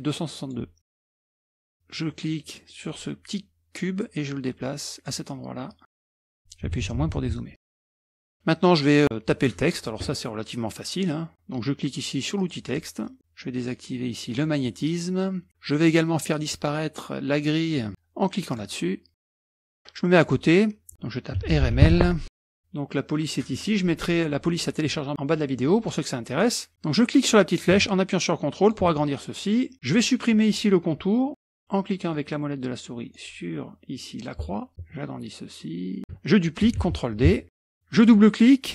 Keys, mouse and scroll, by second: 1.2 click, 1.5 click, 2.1-3.3 middle drag, 2.1 scroll up 1, 4.0-5.5 drag, 5.7 click, 6.1 scroll down 1, 6.7 KP_Subtract, 6.8 KP_Subtract, 7.1 KP_Subtract, 7.2 KP_Subtract, 7.6-8.2 scroll down 2, 12.4 click, 12.8-13.2 scroll up 1, 14.3 click, 15.8 click, 17.7 click, 18.5 click, 19.3 click, 19.5 middle click, 19.5-20.0 scroll up 1, 21.2-22.3 typing, 23.4 click, 26.3-28.8 drag, 29.0-31.4 drag, 31.4-32.1 scroll up 2, 32.1-33.7 drag, 34.7-36.0 ctrl+drag, 36.9 ctrl+d, 37.2-37.6 ctrl+drag, 37.9 click.